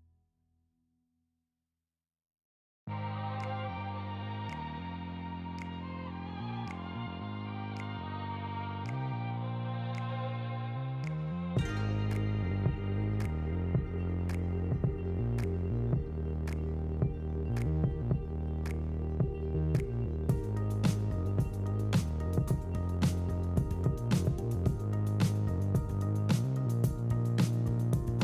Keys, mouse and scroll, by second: 1.3 g, 2.4 r, 3.9 g, 5.0 Tab, 5.6 q, 7.2-9.4 right drag, 9.9 Tab, 10.4 2, 11.4 f, 11.8 Tab, 12.6 ctrl+3, 13.0-13.8 right drag, 14.4-14.8 middle drag, 15.2 shift+middle drag, 15.4 middle click, 15.7 shift+middle drag, 16.3 shift+middle click, 17.9 click, 18.3-19.5 drag, 21.2 click, 22.4 click, 23.8 shift+middle click, 24.2 click, 26.0 click, 27.7-28.2 drag.